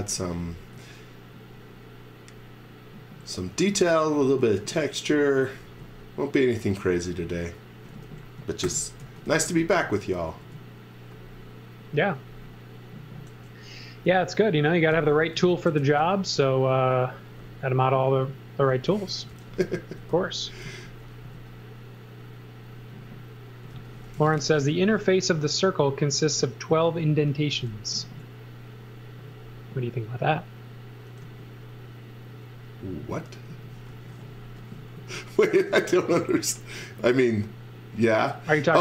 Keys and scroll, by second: 0.2 z, 0.7 x, 2.3 x, 3.5 x, 4.4 z, 5.3 x, 5.6 v, 7.7-10.4 typing, 13.4 f, 15.4 super+z, 15.7 space, 16.3 c, 18.8-21.2 typing, 23.7 x, 24.2 z, 25.5 x, 26.7 z, 27.4 x, 28.0 a, 31.2 e, 33.5 z, 33.9 x, 35.0 z, 35.5 a, 38.7 e.